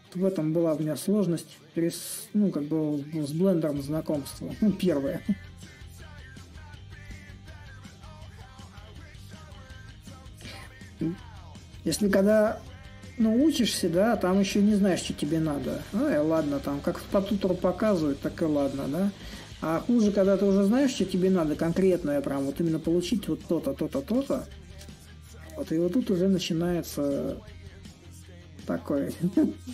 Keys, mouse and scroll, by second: 2.9-7.9 drag, 10.5-16.7 alt+drag, 16.8-22.4 alt+drag, 23.5 ctrl+z, 23.8 ctrl+z, 24.7-29.7 drag.